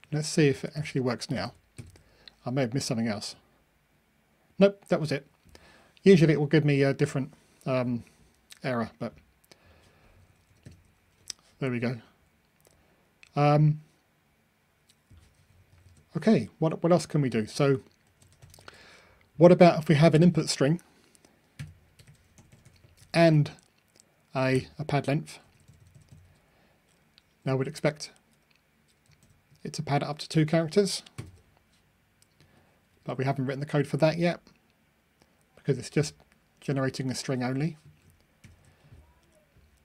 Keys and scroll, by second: 0.7 Delete, 1.7 super+F9, 3.1 ctrl+r, 18.1 super+c, 18.6 super+v, 31.2 super+F9.